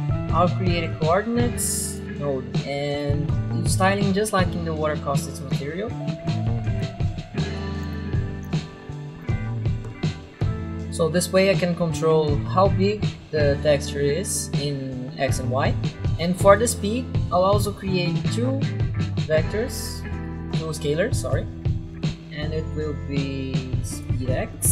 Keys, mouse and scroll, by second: 1.8 u, 2.0 click, 2.9 click, 5.8-10.1 typing, 6.0 click, 7.1 click, 7.3 click, 7.5 ctrl+w, 7.6 click, 8.2 click, 8.7 click, 8.8 click, 8.9 click, 9.1 click, 9.5 click, 9.6 click, 9.8 click, 9.9 click, 10.2 click, 17.8 click, 19.2 ctrl+w, 20.4 click, 21.9 click, 23.9 click, 24.5-24.7 typing.